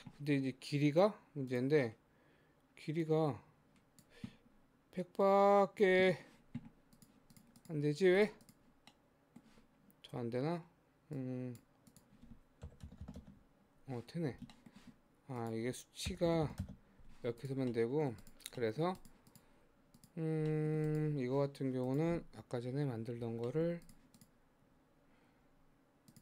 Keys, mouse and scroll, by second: 1.4-7.1 drag, 7.6 click, 8.2 click, 8.5 click, 8.9-11.2 middle drag, 11.2-13.0 drag, 13.0 KP_0, 14.3 scroll down 1, 14.6 shift+middle click, 15.4-16.4 drag, 16.4 KP_0, 17.5 click, 17.7 middle click, 18.3 click, 18.6 middle click, 19.0 click, 19.3 click, 20.0 click, 20.5 middle click, 20.9 click, 21.9 click, 23.1 alt+h, 23.5 middle click, 23.9 click, 24.2 click, 24.8 Tab, 25.5 Tab, 26.1 click.